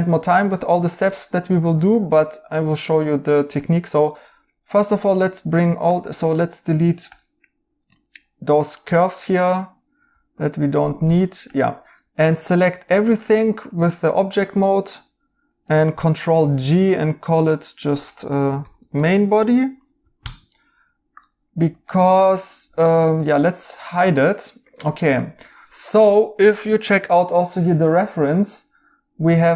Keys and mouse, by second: 0.4 right click, 3.5 Tab, 5.9 2, 8.8 x, 10.1-11.0 typing, 15.9 ctrl+g, 18.0-19.0 typing, 20.1 Return, 20.1 typing.